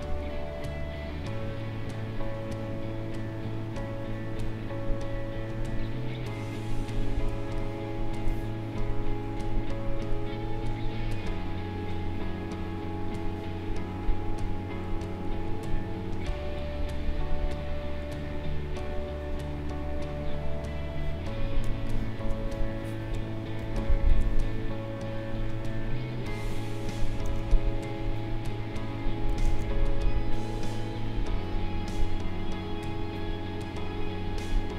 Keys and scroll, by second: 7.3 space, 21.6 space, 27.2 ctrl+z, 29.4 ctrl+z.